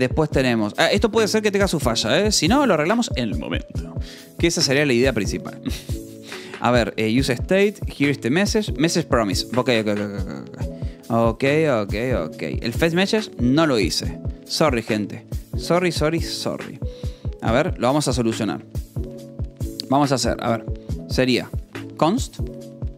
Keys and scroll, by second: 0.0-1.2 typing, 2.6 k, 6.6 j, 8.0 k, 10.4 j, 10.9 k, 12.5 l, 13.8-15.8 typing, 20.3-22.2 typing.